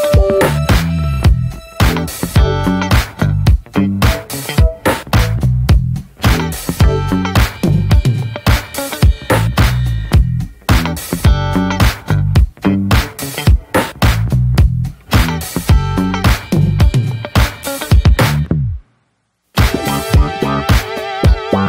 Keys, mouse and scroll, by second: 0.2 alt+middle click, 0.5 alt+middle click, 1.3 ctrl+s, 1.8 click, 3.3 click, 3.8-5.0 scroll down 1, 5.7-7.7 drag, 10.5 drag, 10.8 click, 12.1-20.9 drag, 20.9 ctrl+s, 21.2-21.6 shift+middle drag.